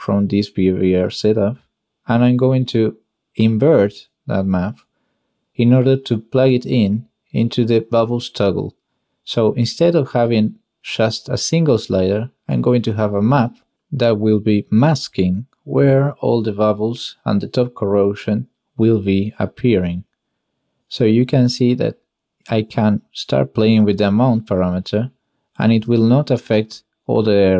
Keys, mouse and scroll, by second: 0.1 ctrl+shift+click, 2.1 click, 2.8 g, 3.7 click, 4.1 click, 4.9 g, 5.4 click, 5.9 click, 7.2 n, 9.7 click, 14.3 n, 16.1-17.7 shift+drag, 19.0-19.5 drag, 21.4-21.9 drag, 23.6-26.9 middle drag.